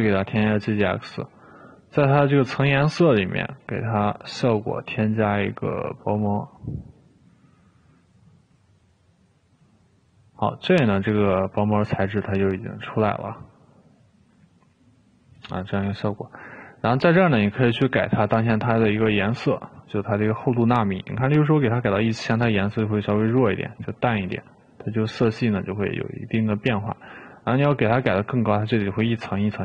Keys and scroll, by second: 22.1 1, 22.1 0, 22.4 Return.